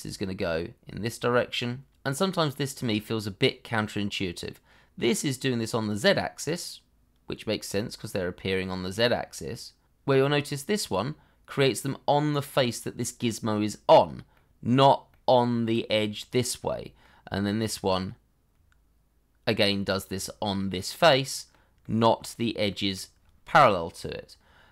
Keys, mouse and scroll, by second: 11.1 scroll up 1, 14.3 middle click, 22.7 middle click.